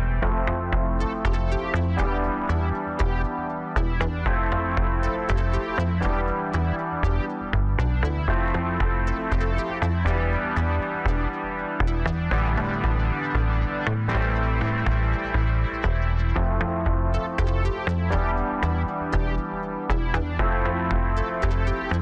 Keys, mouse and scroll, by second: 0.2-1.1 scroll up 1, 1.1 Tab, 2.4 click, 3.0-4.7 scroll up 1, 4.7 click, 6.6 x, 8.3-10.1 middle drag, 10.1 click, 11.0 click, 11.5-12.5 middle drag, 12.5 shift+click, 13.5 f, 13.8-15.3 scroll down 1, 15.3 KP_1, 16.7 click, 17.2-17.8 scroll up 1, 17.8 Tab, 18.1-18.6 scroll down 1, 18.6 s, 20.8-21.9 middle drag, 21.9 KP_3.